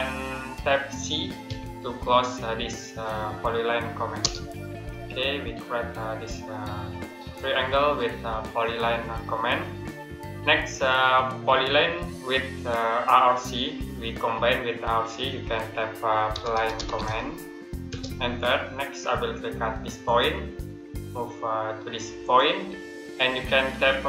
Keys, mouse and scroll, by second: 1.3 c, 4.1 Return, 9.5 Return, 9.7 middle click, 15.9-17.7 typing, 19.9 click.